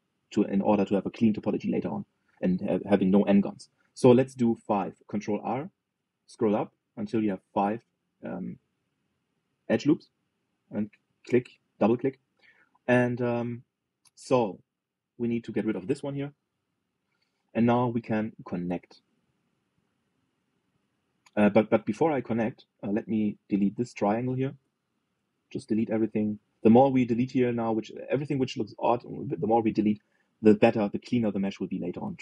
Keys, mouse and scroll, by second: 6.1 ctrl+r, 12.7 shift+middle click, 13.2-13.7 scroll up 2, 13.7-15.4 shift+middle drag, 15.4 click, 16.8 Delete, 18.6-21.3 middle drag, 22.9-24.5 middle drag, 24.5 click, 25.3 Delete, 26.1-28.6 middle drag, 28.7-32.2 middle drag.